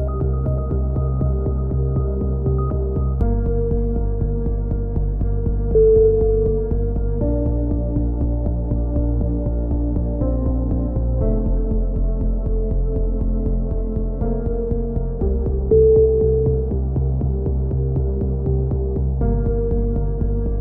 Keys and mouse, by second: 0.7 click, 1.8-2.8 drag, 3.0 a, 3.2 middle click, 3.6 click, 4.2 middle click, 4.4 right click, 5.1-7.7 middle drag, 7.9-8.9 drag, 10.0 click, 11.7 a, 12.2 click, 13.0 middle click, 13.2 click, 13.9 a, 14.2-16.1 drag, 16.1 middle click, 16.3-17.7 drag, 17.7 ctrl+z, 18.7 click, 19.7 click, 20.2 middle click.